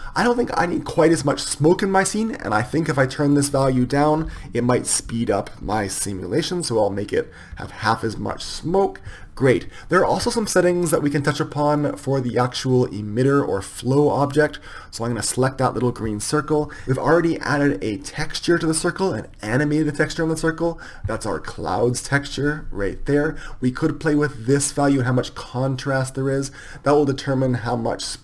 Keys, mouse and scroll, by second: 12.2-22.5 right drag, 22.5-26.7 drag.